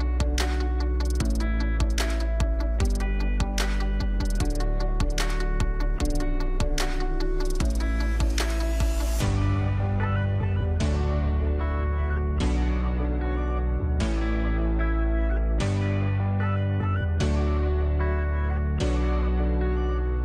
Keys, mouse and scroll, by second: 0.1-6.3 drag, 14.8-20.2 drag.